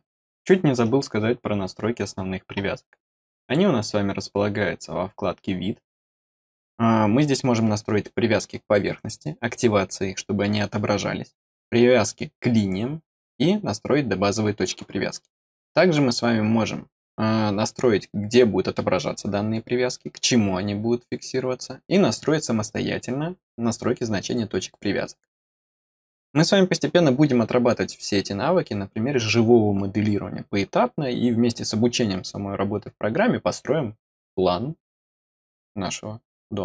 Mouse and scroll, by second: 0.1 middle click, 3.3 click.